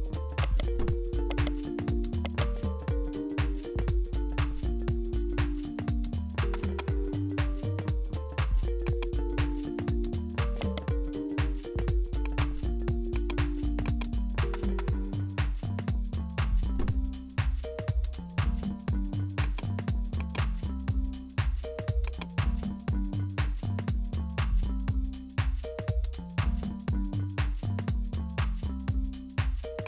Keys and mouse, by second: 0.4 right click, 1.3 right click, 1.7 Tab, 2.2 right click, 2.6 Tab, 7.2 Tab, 8.3 click, 10.2 Tab, 10.6 right click, 10.9 Tab, 12.2-13.9 drag, 18.3 Tab, 19.4-23.1 drag, 23.1 ctrl+b.